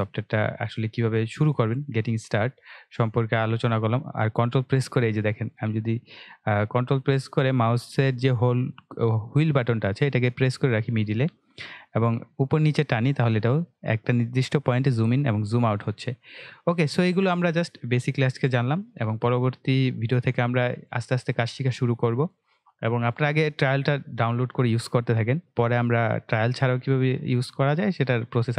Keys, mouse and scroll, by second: 0.0 ctrl+scroll down 1, 1.5-13.7 ctrl+middle drag.